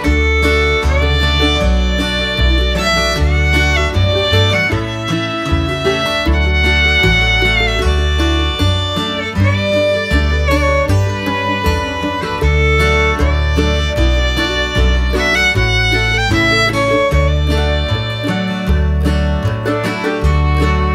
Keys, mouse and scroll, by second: 1.5-4.1 drag, 5.8 click, 7.0 click, 11.3 shift+middle drag, 11.8 middle click, 15.8 click, 20.0-20.7 shift+middle drag.